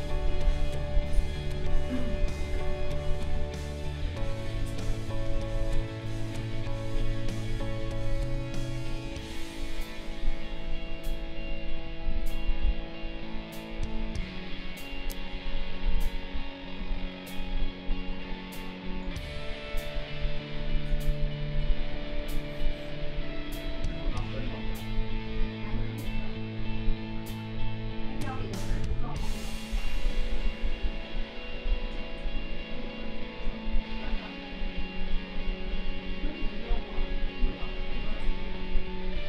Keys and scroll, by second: 0.1 space, 16.3 space.